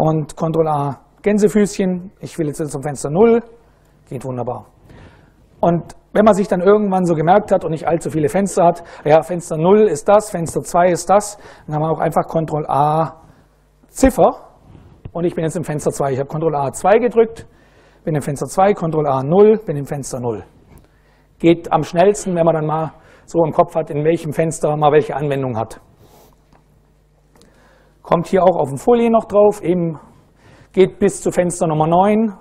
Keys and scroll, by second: 0.9 shift+', 2.2 Up, 3.4 Return, 12.8 ctrl+a, 13.8 2, 18.3 ctrl+a, 19.0 ctrl+o.